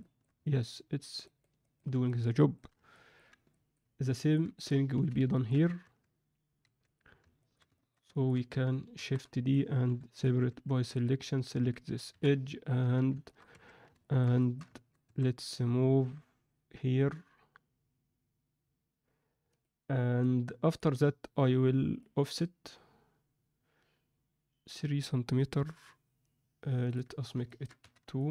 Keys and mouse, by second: 0.4 ctrl+middle click, 1.2 ctrl+middle click, 1.5 ctrl+alt+middle drag, 2.0-2.5 middle drag, 2.9 ctrl+middle click, 3.5 alt+middle click, 4.1 ctrl+alt+middle click, 4.9 z, 5.3 ctrl+middle click, 5.8 Tab, 6.6 2, 6.9 click, 7.7 shift+middle click, 8.1 ctrl+alt+middle click, 8.9 shift+d, 9.8 p, 10.4 Tab, 10.9 click, 11.5 Tab, 12.1 KP_1, 12.7 z, 13.2 shift+middle click, 13.5 1, 13.9 ctrl+alt+middle click, 14.3 alt+shift+middle click, 14.7 ctrl+middle click, 15.0 a, 15.9 e, 20.6 click, 21.9 click, 26.9 click, 27.4 ctrl+alt+middle click, 27.9 z, 28.1 ctrl+alt+middle click.